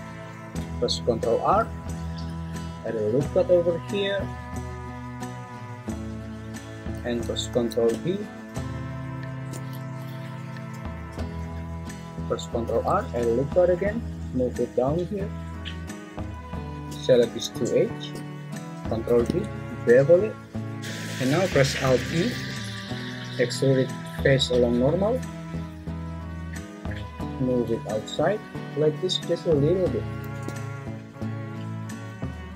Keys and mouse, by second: 1.4 ctrl+r, 7.5 ctrl+b, 9.8 Escape, 12.6 ctrl+r, 16.1 click, 18.8 ctrl+b, 22.3 alt+e.